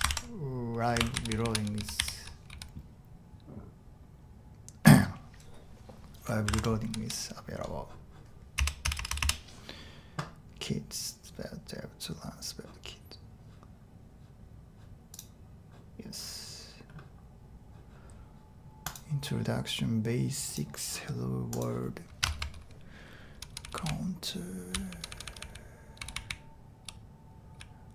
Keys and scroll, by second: 0.0-2.5 typing, 6.5 super+Tab, 6.9 j, 7.0 j, 8.6 Return, 8.8 Return, 9.0 Return, 9.1 Return, 9.2 Return, 23.1-27.9 typing.